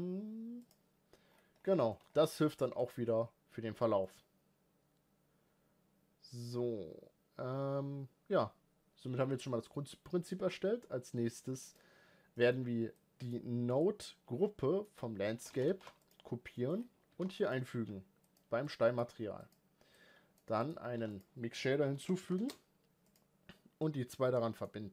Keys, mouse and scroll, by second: 0.6 click, 1.3-1.9 scroll down 5, 1.7 middle click, 1.9 shift+middle drag, 2.1 scroll up 3, 2.4-3.2 shift+middle drag, 3.8-7.6 middle drag, 10.6-11.7 scroll down 1, 11.7 click, 17.1 ctrl+v, 23.1 shift+a.